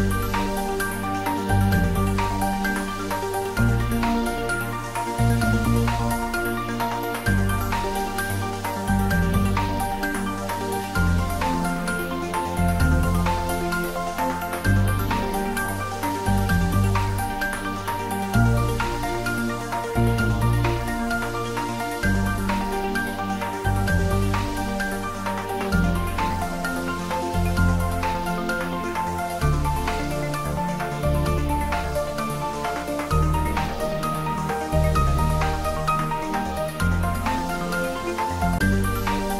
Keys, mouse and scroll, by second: 1.2 click, 2.5 shift+click, 3.5 Tab, 3.9 click, 4.3-5.2 middle click, 5.3-5.6 scroll up 1, 7.1 click, 10.9 scroll up 1, 15.2 click, 16.3 shift+click, 18.8-19.3 scroll down 1, 23.7 click, 24.8 shift+click, 26.2 click, 27.2 shift+click, 28.8 scroll up 1, 30.2 click, 31.5 shift+click, 32.5 scroll down 1, 34.1 shift+click, 36.5 click, 38.6 scroll down 1.